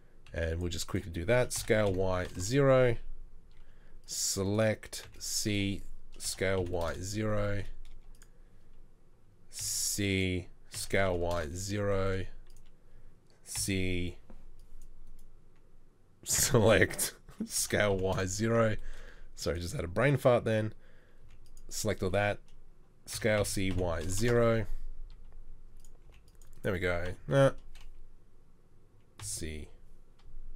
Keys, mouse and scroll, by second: 0.3 c, 1.6 s, 5.1 c, 6.3 s, 9.6 c, 10.4 c, 10.8 s, 13.6 c, 17.6 s, 21.2 c, 23.2 s, 26.1 s, 26.2 c, 27.1 s.